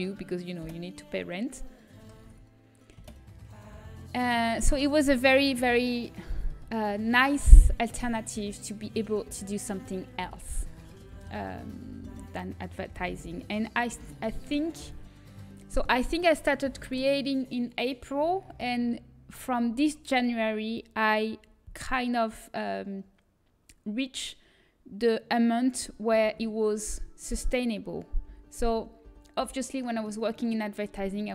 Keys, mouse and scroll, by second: 0.5 Delete, 2.1 ctrl+z, 2.9 Delete, 5.0 middle click, 7.5-8.9 middle drag, 7.5 a, 10.4-14.1 middle drag, 12.0 a, 14.1 l, 26.6 shift+l, 28.6 l, 29.2 l, 29.7 l.